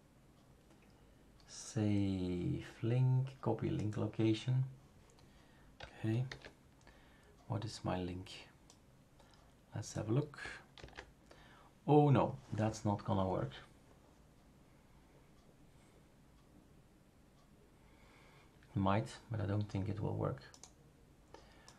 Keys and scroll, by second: 6.3 super+f, 10.8 ctrl+v.